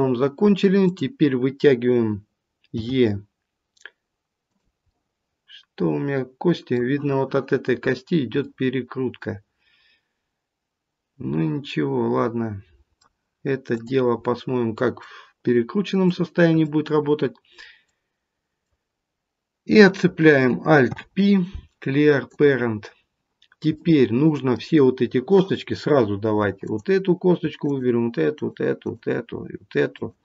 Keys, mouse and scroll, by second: 0.8 click, 2.7 e, 4.9 middle click, 8.4 middle click, 13.7 click, 14.1 middle click, 16.0 middle click, 20.8 alt+p, 23.7 middle click, 23.9 middle click, 26.6 click, 27.5 shift+click.